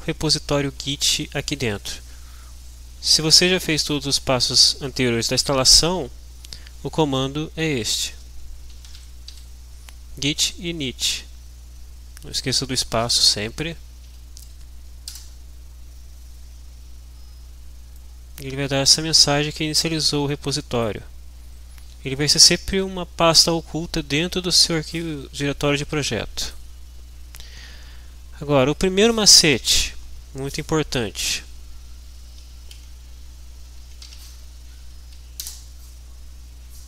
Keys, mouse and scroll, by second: 7.5-9.8 typing, 11.2 Left, 12.1 Right, 12.4 Left, 13.0 Right, 14.1 End, 15.1 Return, 18.1-21.1 drag, 33.6-34.7 typing, 34.7 Down, 35.5 Return.